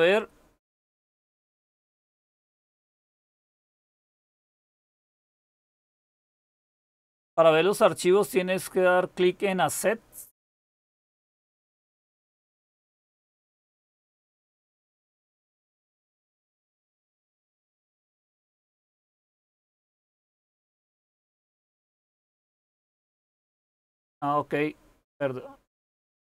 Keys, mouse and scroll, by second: 0.1-0.7 scroll up 1, 0.7-1.6 scroll up 1, 1.6-10.4 scroll up 1, 10.4-11.9 scroll up 1, 11.9-12.6 scroll up 1, 12.6-15.9 scroll up 1, 15.9-17.0 scroll up 1, 17.0-17.8 scroll up 1, 17.8-19.8 scroll up 1, 19.8-20.7 scroll up 1, 20.7-21.5 scroll up 1, 21.5-23.6 scroll up 1, 23.6-24.5 scroll up 1, 24.5-25.3 scroll up 1, 25.3-25.8 scroll up 1, 25.8-26.2 scroll up 1.